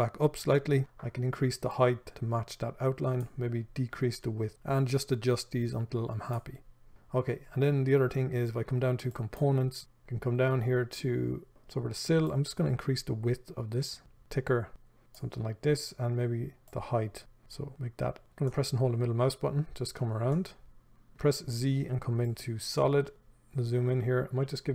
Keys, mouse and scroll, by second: 9.8-11.5 scroll down 1, 11.5 right click, 12.5-18.7 drag, 18.7-24.7 middle drag, 19.4-20.0 scroll down 1, 21.5 z.